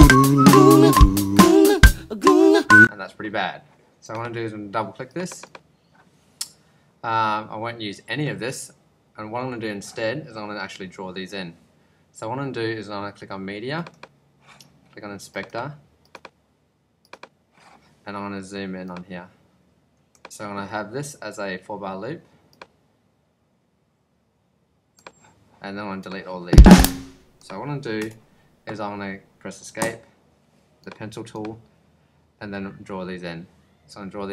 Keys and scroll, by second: 2.6 space, 28.0 BackSpace, 29.8 Home.